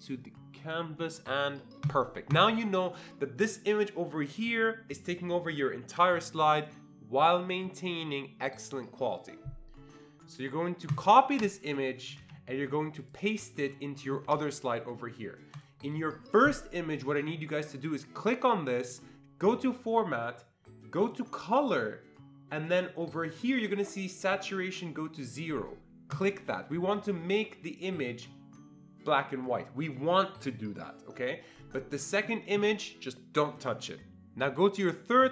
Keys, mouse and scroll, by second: 2.3-5.0 drag, 10.9 click, 12.2 ctrl+c, 13.0 click, 14.3 ctrl+v, 15.6 click, 17.1 click, 18.2 click, 19.4 click, 21.0 click, 26.1 click, 32.1 click.